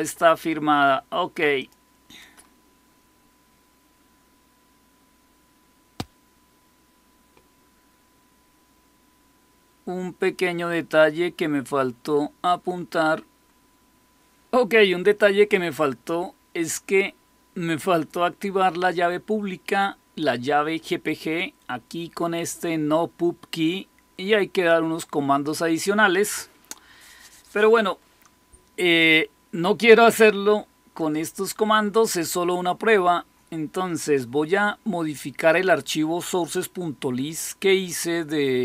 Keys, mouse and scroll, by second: 1.5 click, 23.5-25.4 drag, 30.9 click, 36.3 click, 37.8 click.